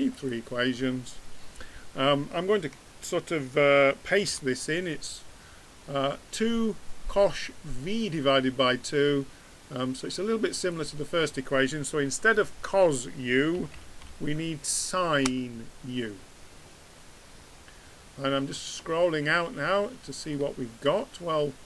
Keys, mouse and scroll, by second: 12.5 BackSpace.